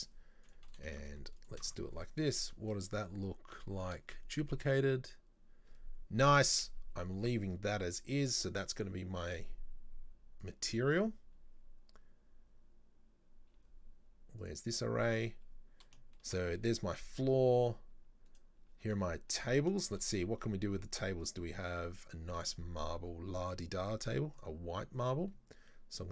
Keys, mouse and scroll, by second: 0.5-2.4 drag, 2.4-4.1 middle drag, 4.1-4.5 scroll up 1, 6.8-7.6 scroll down 4, 7.7-8.6 scroll down 6, 10.4 click, 14.4 click, 15.0-18.3 middle drag, 18.3 right click, 18.9-19.4 scroll up 2, 19.4 middle click, 20.1-20.5 scroll up 3, 20.5-21.3 middle drag, 21.3 right click, 22.4-25.6 drag.